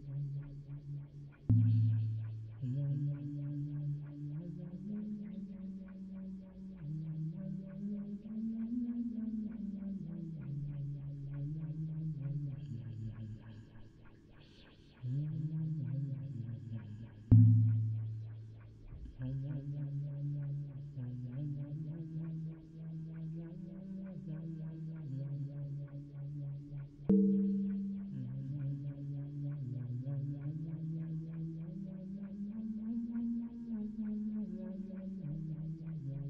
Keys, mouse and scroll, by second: 5.5-13.9 d, 14.6-15.8 d, 18.1 d, 23.1 d, 26.2-26.6 n, 27.5-33.3 d, 34.1 d.